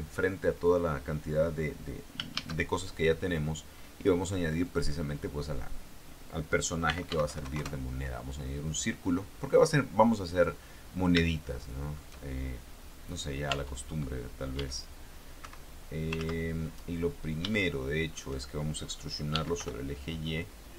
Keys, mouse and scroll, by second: 2.5 shift+a, 4.8 click, 7.0 r, 7.3 x, 7.4 KP_9, 7.6 KP_0, 7.8 KP_Enter, 9.6-10.8 drag, 11.0 scroll up 1, 11.6 shift+middle click, 13.9 Tab, 14.7 e, 15.6 Escape, 16.4 ctrl+z, 16.8 ctrl+click, 17.6 shift+middle click, 19.5 e, 19.7 y.